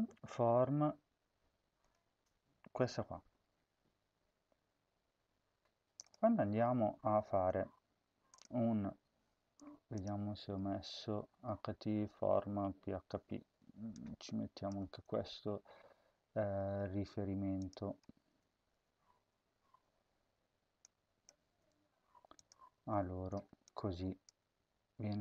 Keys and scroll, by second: 14.7 ctrl+c, 21.3 ctrl+c, 22.7 ctrl+v, 24.1 Tab.